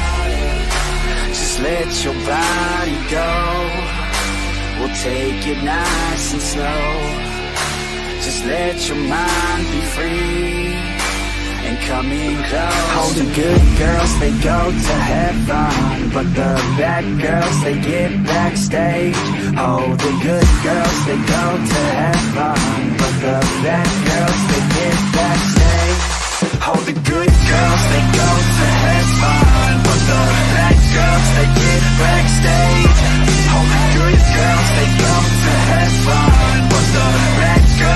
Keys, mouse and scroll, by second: 1.7-3.4 middle drag, 4.1-6.2 drag, 8.0 ctrl+z, 8.2 click, 8.7 middle click, 9.4 click, 9.8 middle click, 10.2 click, 10.7 middle click, 11.0 click, 11.3 click, 11.4 middle click, 11.6 click, 11.8 click, 12.1 click, 12.3 middle click, 12.6 click, 13.0 click, 13.5 ctrl+z, 13.6 ctrl+z, 13.7 click, 14.0 click, 14.2 middle click, 14.4 click, 14.6 middle click, 14.8 click, 15.0 middle click, 15.2 click, 15.4 middle click, 16.1 click, 16.6 middle click, 16.8 click, 17.1 middle click, 17.3 click, 17.5 middle click, 17.8 click, 18.1 middle click, 18.3 click, 18.6 middle click, 19.0 click, 19.2 middle click, 19.6 click, 19.9 click, 20.3 click, 20.6 middle click, 20.9 middle click, 21.1 shift+middle click, 21.9 g, 22.3 click, 22.7 click, 22.9 middle click, 23.2 click, 23.4 middle click, 23.8 click, 23.9 middle click, 24.0 click, 24.3 middle click, 24.4 click, 24.6 click, 24.7 click, 24.8 middle click, 25.2 click, 25.2 middle click, 25.4 shift+click, 25.5 middle click, 25.7 click, 26.3 middle click, 26.5 click, 26.9 shift+click, 27.2 click, 27.6 middle click, 27.7 shift+middle click, 27.8 middle click, 28.1 f, 28.4 click, 28.7 click, 28.9 click, 29.2 click, 29.6 middle click, 29.6 n, 31.0-35.9 middle drag.